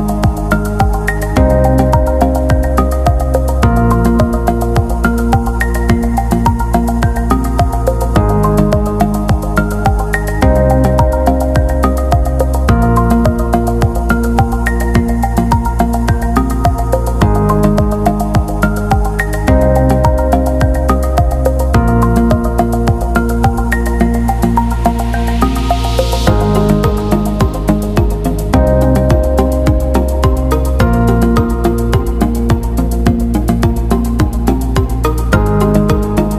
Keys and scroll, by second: 0.3 Up, 0.3 Left, 0.4 Left, 4.1-4.9 typing, 7.0 z, 8.7 p, 19.6 Escape, 22.5 p, 33.8 Escape.